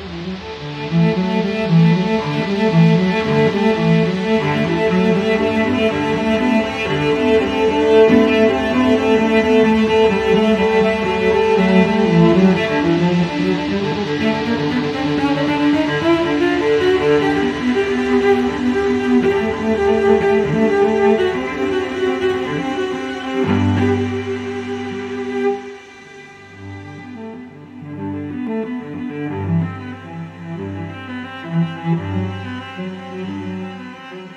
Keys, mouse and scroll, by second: 0.2 click, 5.1 click, 6.2 click, 7.4 click, 8.8 -, 10.1 click, 10.9 click, 12.6 x, 13.3 0, 14.4 click, 15.7 y, 16.6 0, 17.8 click, 18.3 click, 19.5-20.9 typing, 21.7 click, 22.2 click, 23.0-24.3 typing, 25.2 click, 26.7 click, 29.4 click, 30.3 click, 31.3-34.3 typing.